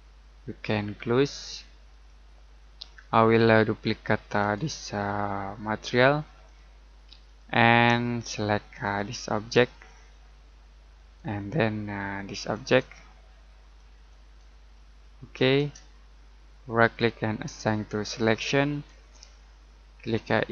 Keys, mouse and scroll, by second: 9.9 shift+middle click, 12.3 click, 13.7 click, 14.7 middle click, 16.8 right click, 18.0 click.